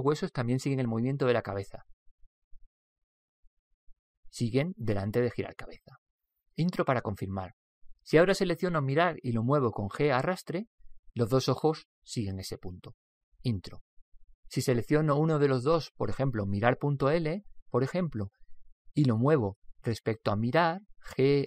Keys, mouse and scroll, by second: 9.7 right click, 10.4 Return, 10.7 g, 17.6 right click, 21.4 g.